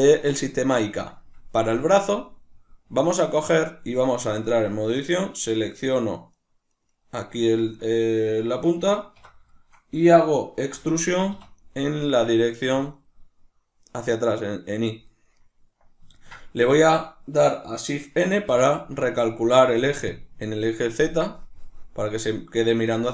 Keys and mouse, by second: 4.2 Tab, 5.0 right click, 5.5 right click, 5.8 right click, 6.0 right click, 6.4 right click, 6.7 right click, 6.9 right click, 7.2 right click, 8.9 alt+q, 9.6-12.9 shift+middle drag, 10.7 e, 12.9 click, 13.8 right click, 16.2-23.1 ctrl+middle drag, 18.3 shift+n.